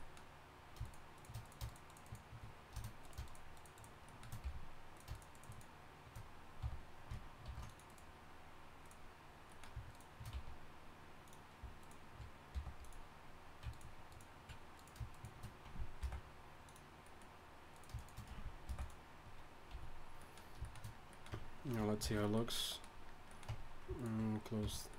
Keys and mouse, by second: 0.1-5.2 drag, 4.4 f, 6.6 f, 7.4 ctrl+r, 9.5-10.6 middle drag, 10.3 s, 12.5 g, 16.0 alt+m, 17.7 click, 18.6 alt+m, 19.1 middle click, 19.7 a, 21.3 Tab, 22.0 shift+h, 23.5 Tab, 24.6 f.